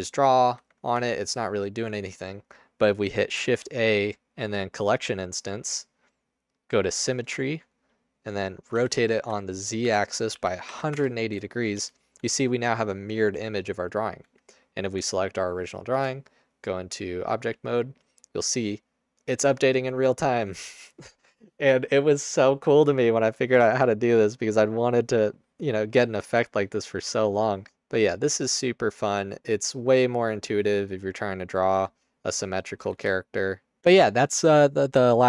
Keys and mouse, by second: 0.9 Tab, 3.4 shift+a, 8.9-10.7 typing, 11.1 Return, 11.9 Tab, 12.3 Tab, 14.2 Tab, 15.0 Tab, 15.9 Tab, 18.8 click, 27.8 ctrl+z, 30.1 Tab, 30.3 x, 30.7 Tab, 30.7 x.